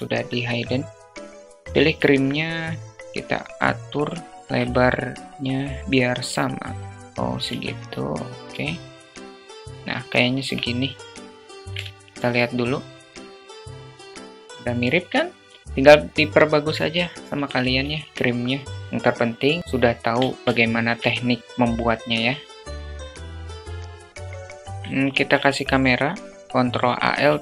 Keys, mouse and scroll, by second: 0.2 s, 3.5 alt+z, 4.1-4.4 alt+shift+middle drag, 4.7-6.8 drag, 6.9 ctrl+z, 7.1 s, 8.9 `, 10.2 alt+z, 10.6-11.0 alt+shift+middle drag, 11.3 shift+middle click, 12.6-13.4 drag, 13.7 alt+middle drag, 14.2 alt+middle click, 15.2 click, 16.4 shift+a, 17.8 s, 19.3 alt+middle drag, 19.8 alt+middle click, 20.4 Tab, 21.0 2, 21.3 click, 21.6 alt+shift+click, 22.1 alt+shift+middle click, 22.6 e, 23.0 ctrl+b, 23.3 Tab, 23.3 `, 23.6 alt+shift+middle click, 23.8 alt+shift+middle click, 24.0 alt+middle click, 24.3 alt+shift+middle click, 24.5 alt+shift+middle click, 24.5 shift+a, 26.7 ctrl+alt+KP_0.